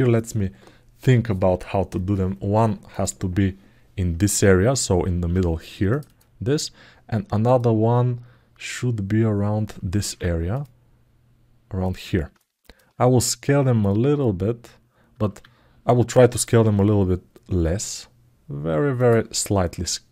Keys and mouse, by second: 2.7 click, 7.2 click, 12.1 ctrl+alt+middle click.